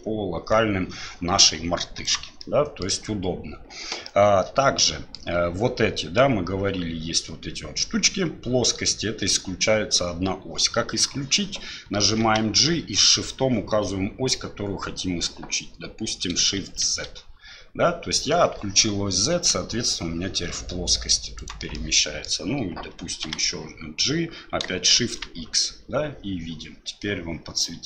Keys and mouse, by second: 2.4-2.9 middle drag, 4.1-5.2 middle drag, 12.2 g, 21.7-22.3 middle drag, 23.2 g.